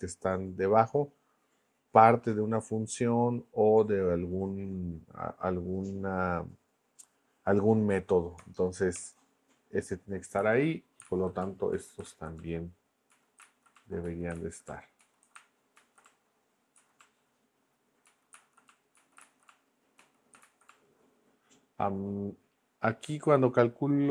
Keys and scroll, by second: 8.4 BackSpace, 8.9 Return, 11.4 Tab, 11.7 Down, 12.0 super+Left, 12.4 Tab, 13.1 Down, 13.4 super+Left, 13.7 Tab, 14.0 Down, 14.3 super+Left, 14.7 Tab, 15.0 Down, 15.8 super+Left, 16.0 Tab, 16.7 Down, 17.0 Tab, 18.0 Down, 18.3 super+Left, 18.7 Tab, 18.9 Down, 19.2 super+Left, 19.4 Tab, 19.9 Down, 20.4 super+Left, 20.7 Tab.